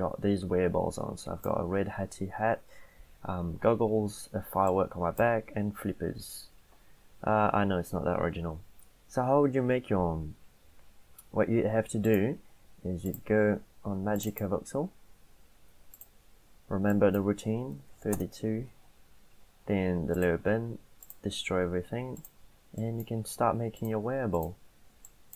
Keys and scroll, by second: 17.6-18.5 typing.